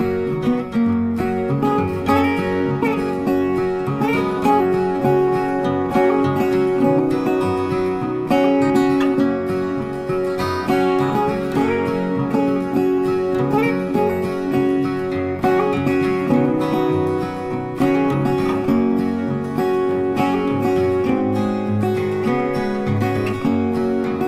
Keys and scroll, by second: 12.9 ctrl+d.